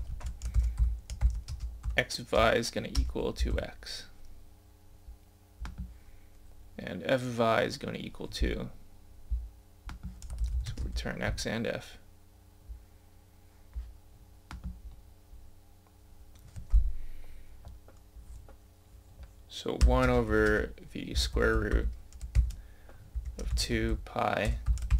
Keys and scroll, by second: 8.5 scroll up 1, 8.7-10.3 scroll, 13.9 scroll down 1, 15.0 scroll up 1, 15.5 scroll down 1.